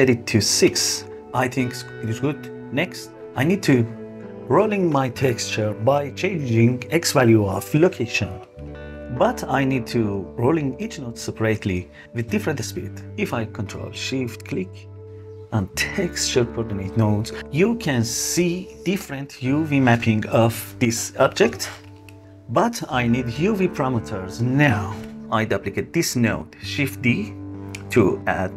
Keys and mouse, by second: 7.8-9.0 drag, 15.0 ctrl+shift+click, 15.9 ctrl+shift+click, 16.8 ctrl+shift+click, 17.6 ctrl+shift+click, 19.1 ctrl+shift+click, 19.5 ctrl+shift+click, 20.9 ctrl+shift+click, 21.4 ctrl+shift+click, 22.3 ctrl+shift+click, 22.8 ctrl+shift+click, 25.8 shift+s, 26.1 shift+d, 27.5 click.